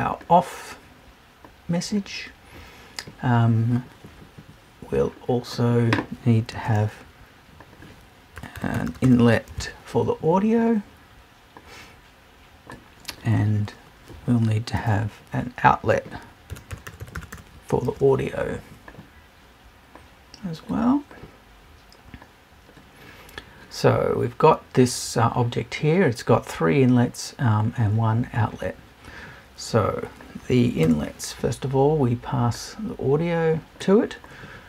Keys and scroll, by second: 30.8 BackSpace.